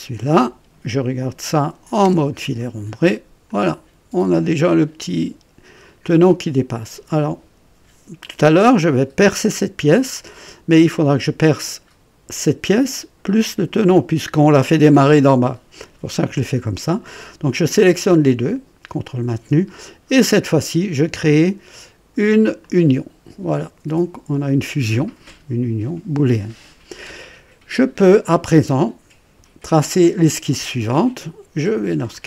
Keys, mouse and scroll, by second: 0.1 click, 2.0 &, 2.8-3.1 scroll up 1, 3.4-5.9 drag, 3.7 typing, 6.0 right click, 8.2 click, 10.4 click, 17.6 click, 19.0 ctrl+click, 22.6 click, 32.0 click.